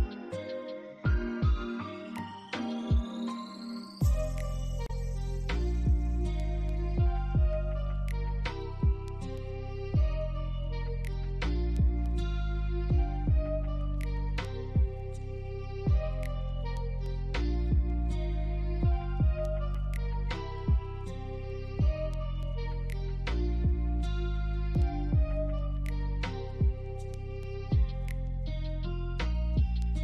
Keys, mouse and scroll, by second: 1.6 ctrl+z, 7.1-7.5 scroll down 2, 7.3 alt+middle click, 8.3 alt+middle click, 16.8 scroll down 1, 17.2 alt+click, 20.1 scroll down 1, 20.5 alt+middle click, 21.5 alt+click, 23.3 scroll down 1, 24.0-24.5 scroll up 1, 24.5 scroll down 1, 26.3 right click.